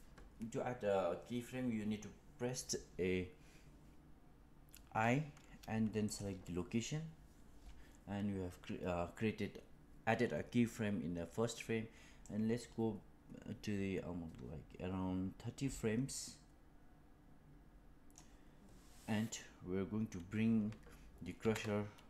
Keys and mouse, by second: 12.1-18.1 drag, 21.3 g.